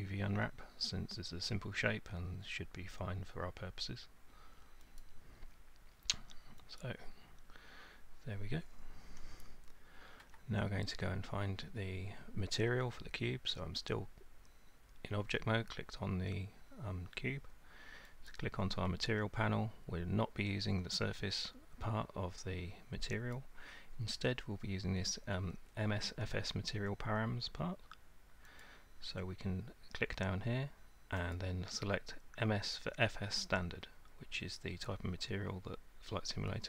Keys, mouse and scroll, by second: 5.0 click, 6.8 click, 10.2 Tab, 18.3 click, 23.4 click, 24.0-28.4 drag, 28.6-29.5 drag, 31.4 click.